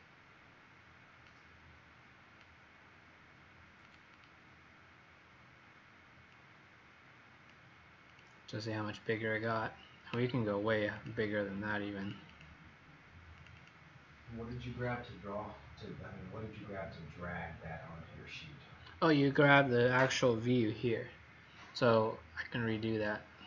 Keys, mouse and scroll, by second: 4.1 click, 6.3 click.